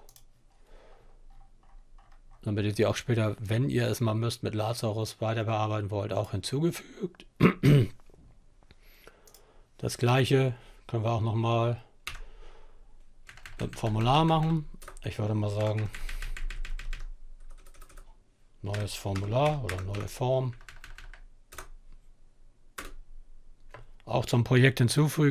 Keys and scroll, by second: 11.0 Up, 12.1 Left, 12.3 Left, 12.5 Left, 13.0 Left, 13.2 Left, 13.3 Left, 13.6 BackSpace, 14.5 f, 14.6 Right, 14.8 Right, 14.9 Right, 15.1 Right, 15.2 Right, 15.4 Right, 15.6 Right, 15.8 Right, 16.3-20.4 typing, 19.5 Left, 19.7 Left, 19.8 Left, 21.5-22.3 typing, 24.4-25.2 typing.